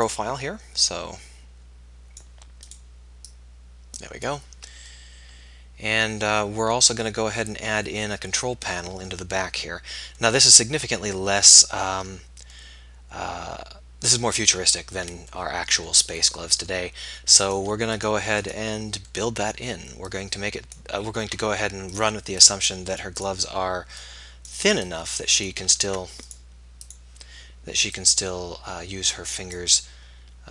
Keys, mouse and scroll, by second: 9.5 middle click, 10.8-11.8 middle drag, 12.6-14.4 middle drag, 16.5 middle click, 19.2 middle click, 19.4 right click, 20.2-21.2 drag, 21.2 ctrl+z, 25.7 ctrl+z.